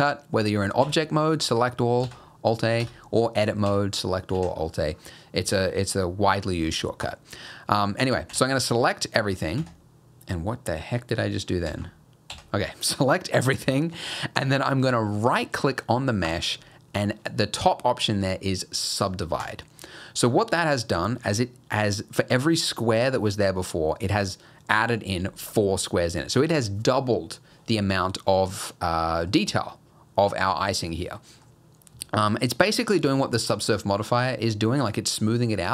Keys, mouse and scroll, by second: 0.8-1.5 scroll down 2, 0.8 a, 2.0 alt+a, 2.5 click, 2.8 Tab, 3.7 a, 4.3 alt+a, 4.7-5.7 scroll up 4, 7.0 click, 8.3 a, 8.3 s, 11.7 ctrl+z, 12.3 a, 16.3 right click, 20.3 middle click, 20.7 scroll up 1, 21.1 shift+middle click, 29.1 middle click, 29.7 middle click, 31.2 middle click, 31.6-31.9 scroll up 1, 32.0 shift+middle click.